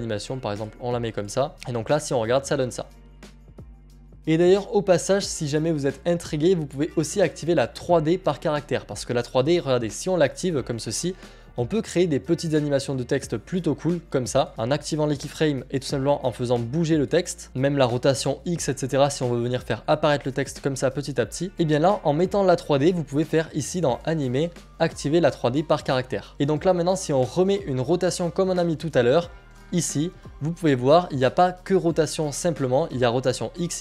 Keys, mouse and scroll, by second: 4.2-7.3 scroll, 10.7 click, 16.2 click, 18.2 click, 20.0 click, 24.4 click, 24.7-26.0 scroll, 26.3 click, 28.8 click, 29.5 click, 33.5-33.8 scroll.